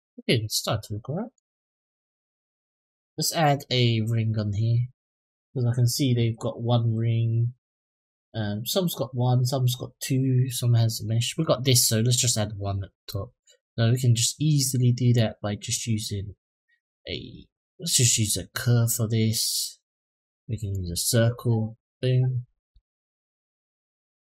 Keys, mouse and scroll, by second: 2.5-3.1 scroll down 1, 3.1 middle drag, 12.9 middle drag, 14.9-20.7 drag, 21.6 click, 22.5 s.